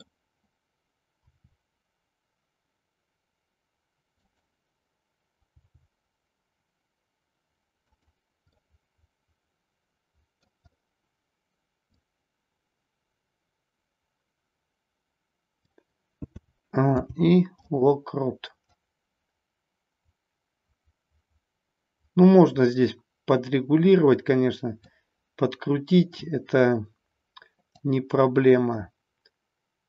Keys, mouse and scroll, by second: 1.2 r, 4.3 click, 5.4 g, 7.9 click, 8.4 scroll up 1, 8.7-10.4 middle drag, 11.8-15.7 drag, 16.3 a, 16.9 i, 18.8-24.8 drag, 27.8-29.8 drag.